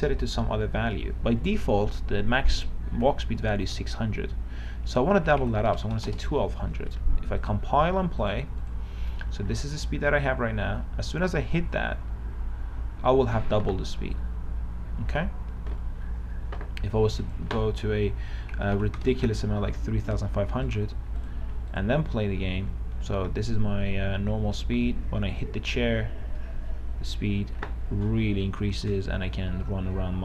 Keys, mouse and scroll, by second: 5.4 KP_1, 5.6 KP_2, 6.0 KP_0, 7.7 click, 9.3 w, 9.6 a, 10.3 a, 10.5 a, 17.4 click, 18.8 KP_3, 19.0 KP_5, 19.2 KP_0, 20.9 click, 22.3-22.9 w, 23.1 w.